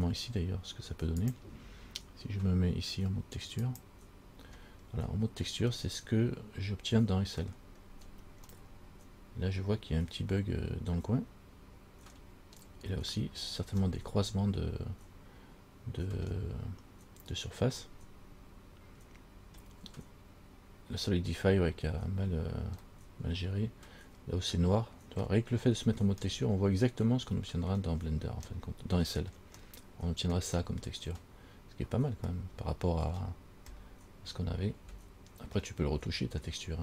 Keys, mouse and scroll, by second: 1.4 click, 3.9 click, 5.0-5.9 scroll up 4, 6.0 middle click, 8.0-8.5 scroll up 1, 8.5 scroll up 1, 8.8 middle click, 12.4-12.8 scroll down 1, 12.8-14.0 scroll up 3, 14.2 middle click, 14.2 scroll up 1, 16.4 scroll down 1, 18.1 middle click, 18.1 scroll up 1, 19.9 scroll down 1, 23.5 middle click, 23.5 scroll up 1, 25.4 scroll down 1, 26.0-26.4 scroll down 1, 26.5 middle click, 28.2 scroll down 3, 28.7 middle click, 29.8 middle click, 31.8 scroll up 2, 32.5 middle click, 33.9 middle click.